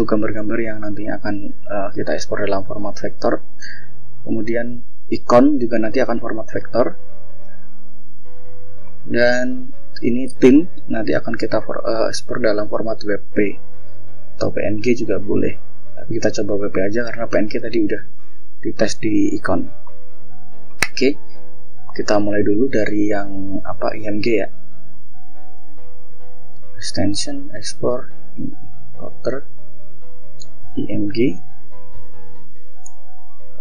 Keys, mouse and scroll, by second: 0.6 scroll up 2, 1.4-2.1 scroll down 4, 2.8 click, 4.8 click, 5.6 click, 6.4 click, 6.9 scroll down 1, 7.6 click, 8.0 scroll down 1, 8.8 click, 10.3 click, 11.2 click, 11.9 click, 13.4-13.7 scroll down 2, 14.2 click, 14.7-15.4 scroll up 2, 16.3-18.7 scroll up 9, 19.0 scroll down 1, 19.4 click, 19.9 scroll up 1, 21.0 click, 23.7 scroll down 1, 25.8 click, 27.5 click, 28.7 click, 29.6-30.6 typing, 33.0 click.